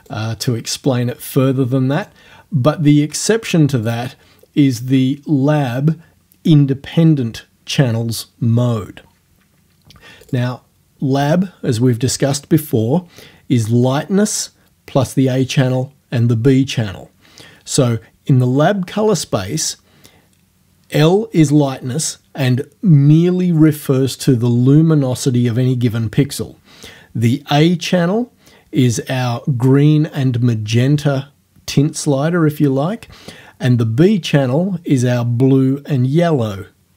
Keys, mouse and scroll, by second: 0.0 right click, 2.0 right click, 3.9 click, 10.3 click.